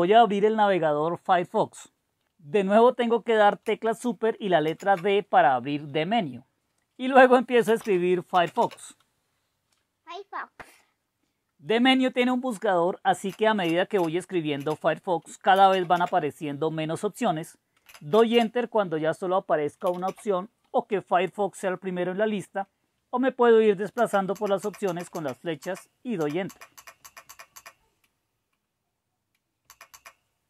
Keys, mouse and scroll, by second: 4.7 super+d, 7.4-9.2 typing, 13.4-18.4 typing, 19.7-20.6 typing, 23.9 Right, 24.3 Right, 24.6 Right, 24.9 Right, 25.1 Right, 25.6 Right, 26.2 Right, 26.4 Right, 26.7 Right, 27.0 Right, 27.3 Right, 27.5 Right, 29.6 Right, 30.1 Right.